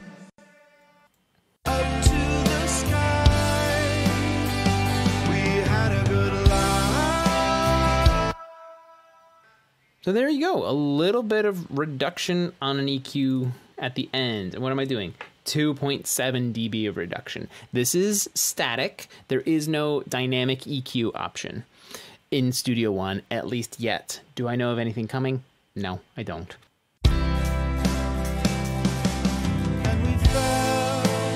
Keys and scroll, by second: 0.9 space, 2.6 space, 6.8 space, 9.3 space, 9.4 space, 28.1 space.